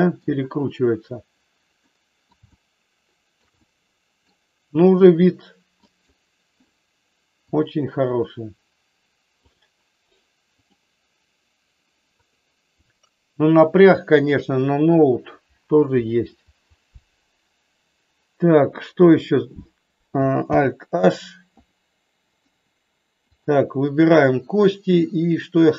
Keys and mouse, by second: 1.8 middle click, 2.5 shift+middle click, 3.6 middle click, 20.5 alt+h, 22.3 click, 23.4 click.